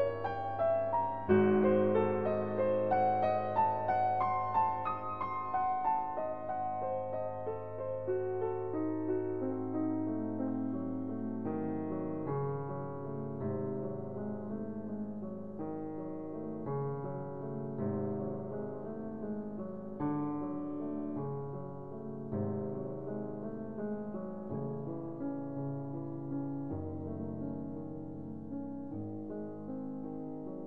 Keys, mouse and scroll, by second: 2.4 alt+m, 4.5-7.3 middle drag, 6.9 ctrl+z, 7.5 ctrl+z, 8.5 ctrl+z, 9.3 ctrl+z, 9.9 ctrl+z, 12.3-15.5 drag, 14.7 alt+m, 17.1 s, 20.1-23.1 drag, 22.3 s, 25.9-27.9 drag, 27.9 alt+m, 30.1-30.6 drag.